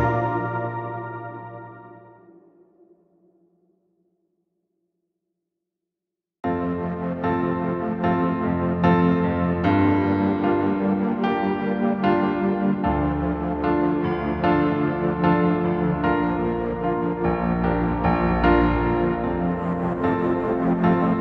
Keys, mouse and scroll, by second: 0.6 scroll down 1, 0.9 scroll up 1, 1.1 middle click, 3.1 scroll up 1, 4.5 scroll down 1, 5.1 middle click, 8.1 scroll down 1, 8.3 scroll up 1, 10.5 scroll down 1, 11.1-11.5 scroll up 1, 11.5 scroll down 1, 11.7 middle click, 12.4 scroll down 1, 12.6 middle click, 13.5 scroll down 1, 13.8 scroll up 1, 14.3 scroll down 1, 14.5 middle click, 15.5 middle click, 16.3 middle click, 16.6 ctrl+z, 16.8 ctrl+z, 18.3 middle click, 18.6 scroll up 1, 18.8 middle click, 19.2 scroll down 1, 20.6 space.